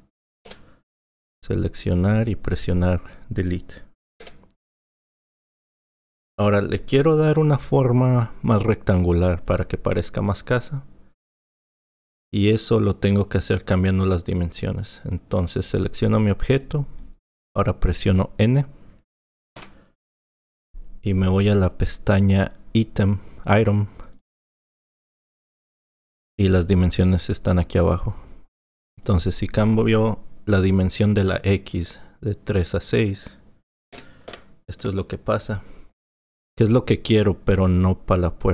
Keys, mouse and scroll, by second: 0.5 Delete, 2.1 click, 4.2 Delete, 6.0 click, 16.6 click, 19.6 n, 24.1 click, 29.0-32.2 drag.